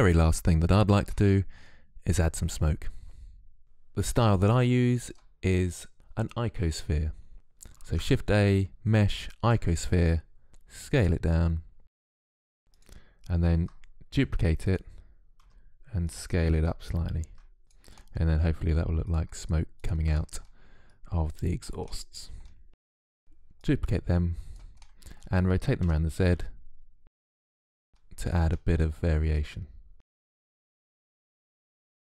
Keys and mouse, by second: 3.6 KP_3, 5.0-6.5 drag, 7.7 shift+a, 10.5 s, 12.6 g, 13.4 shift+d, 15.4 s, 17.1 shift+d, 18.1 s, 18.3 shift+d, 18.7 s, 18.9 click, 19.1 middle click, 19.7-20.7 drag, 20.9 click, 21.3 middle click, 21.5 click, 21.5 shift+d, 22.1 middle click, 23.1 shift+d, 25.6 r, 28.1 click, 28.1 middle click, 28.1 right click, 28.5 ctrl+z, 28.8 middle click, 28.8 right click, 29.0 click, 29.6 s, 29.8 click.